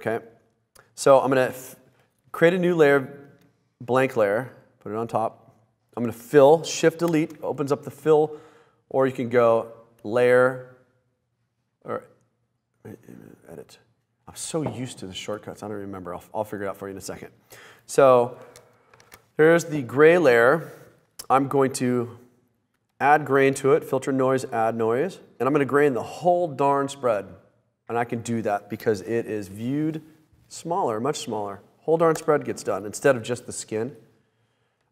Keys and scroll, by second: 7.2 shift+BackSpace, 19.1 super+=.